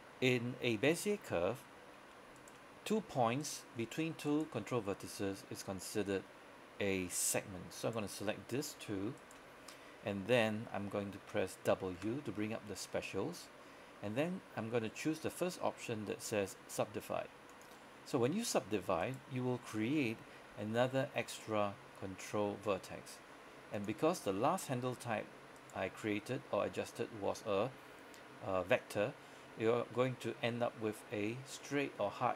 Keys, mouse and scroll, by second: 2.4 shift+right click, 4.4 shift+right click, 7.9 right click, 9.3 shift+right click, 12.1 w, 17.6 click, 19.1 right click, 20.6 g, 23.8 click, 25.6 right click, 30.1 g.